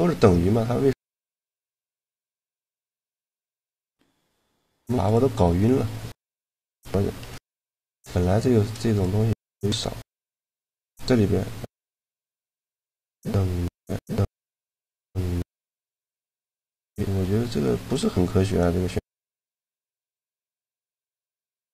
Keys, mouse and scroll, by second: 1.7-2.8 middle drag, 2.8 click, 3.1-4.2 middle drag, 4.2-6.3 right drag, 4.6 Tab, 6.3 KP_Decimal, 7.4 Tab, 9.2 shift+g, 9.5 click, 12.7 middle click, 13.7-15.4 drag, 15.4 typing, 20.2 middle click, 21.5-21.7 right drag.